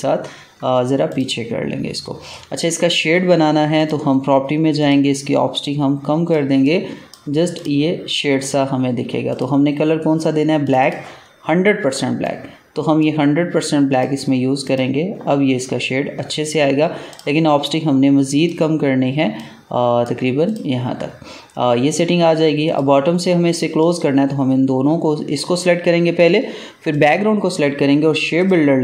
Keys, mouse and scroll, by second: 1.0-13.8 drag, 17.0 click.